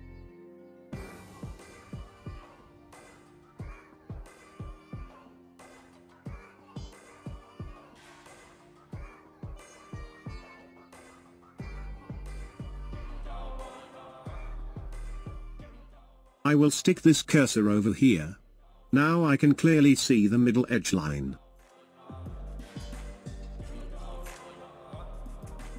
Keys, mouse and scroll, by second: 10.0-14.0 drag, 17.1-18.8 drag, 19.1-22.2 drag, 24.0-25.5 drag.